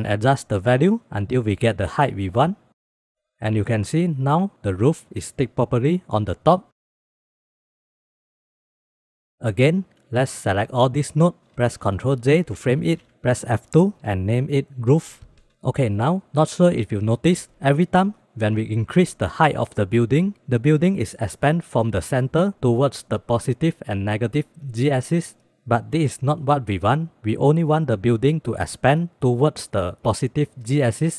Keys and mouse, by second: 2.1 shift+middle click, 2.4 middle click, 4.3-6.6 drag, 7.1-8.7 drag, 8.7 ctrl+s, 9.6-10.5 drag, 11.9 ctrl+j, 12.7 click, 13.4 F2, 14.7 o, 15.5 click, 16.6 click, 18.8 ctrl+z, 18.8 click, 20.4 click, 21.3 click, 21.5 click, 22.8 ctrl+z, 23.4 click, 23.6 click, 23.9 click.